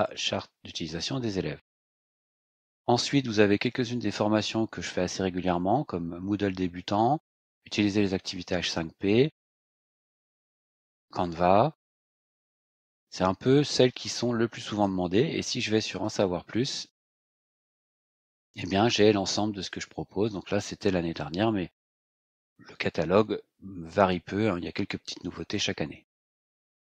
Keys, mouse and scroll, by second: 1.7 click, 2.7-3.1 scroll down 2, 15.9 ctrl+click, 17.2 click, 18.5-21.0 scroll down 11, 21.3-21.9 scroll down 3, 22.7-23.1 scroll down 2, 24.4-25.4 scroll down 4, 25.9-26.5 scroll up 4.